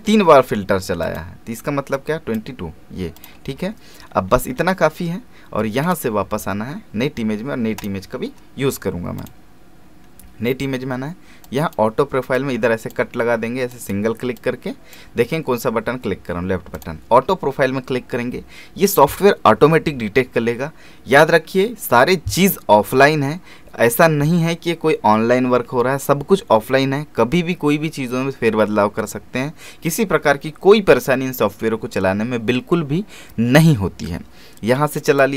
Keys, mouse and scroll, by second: 4.0-4.3 scroll down 1, 4.3 scroll up 1, 5.8 click, 11.4-16.7 drag, 18.9 click, 21.1 click, 35.0 click.